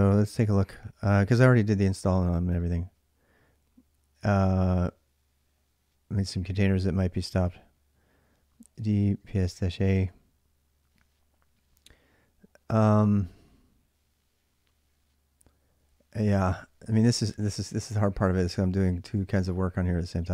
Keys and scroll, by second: 8.4-9.6 typing, 16.4-19.4 typing.